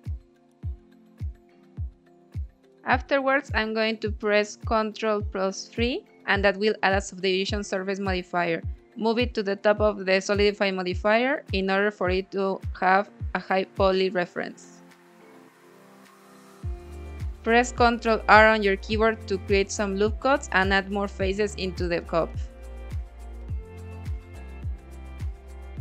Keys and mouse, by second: 0.3-2.3 middle drag, 2.9 Tab, 3.5 Tab, 4.0-4.8 drag, 5.3 ctrl+1, 6.4 ctrl+2, 7.0 ctrl+3, 8.2-9.3 drag, 10.2-11.0 middle drag, 11.1 middle click, 12.1 Tab, 14.3 ctrl+r, 19.2 Escape, 19.6 click, 19.8 middle click, 22.3 ctrl+r, 24.3 click, 24.9 middle click, 25.4 click.